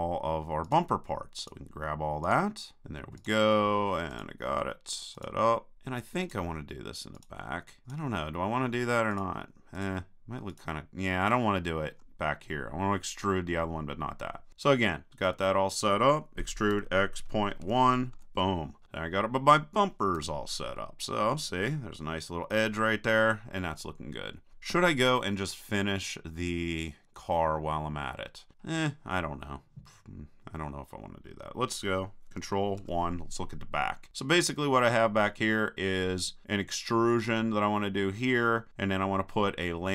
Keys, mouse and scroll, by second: 14.8-16.3 middle drag, 16.4 e, 20.2 a, 20.8-22.1 middle drag, 22.8 middle click, 23.8 middle click, 24.7 KP_3, 26.7-27.9 middle drag, 28.3-32.8 middle drag, 32.8 ctrl+KP_1.